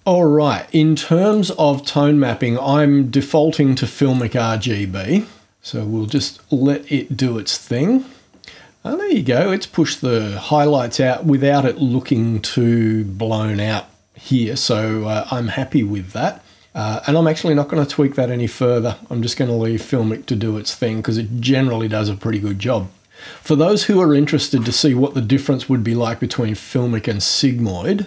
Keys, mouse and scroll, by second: 1.2 click, 4.1 click, 5.5 click, 6.0 click.